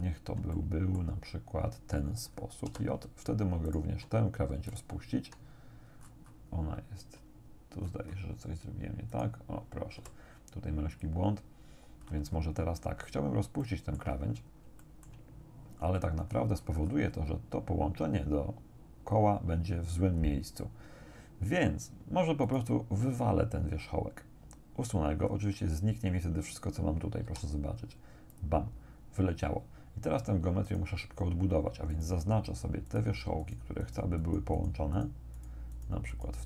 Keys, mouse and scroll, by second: 0.6 shift+right click, 2.7 j, 3.7 right click, 4.7 shift+right click, 6.1-6.5 scroll up 1, 7.9-8.3 scroll up 1, 9.1 right click, 10.0 g, 10.9 click, 12.1-13.3 scroll down 2, 13.7 shift+click, 14.2-14.7 shift+scroll down 2, 14.7 shift+middle click, 14.9 shift+click, 15.3-16.3 shift+middle drag, 16.3-17.4 scroll up 2, 20.1 scroll down 1, 22.5 right click, 25.3-25.8 scroll down 1, 27.3 x, 28.3 click, 30.7 right click, 31.9 shift+right click, 32.9 shift+right click, 33.5 shift+right click, 34.3 shift+right click, 35.0 shift+right click, 35.4 shift+right click, 35.8 shift+right click, 36.3 shift+right click.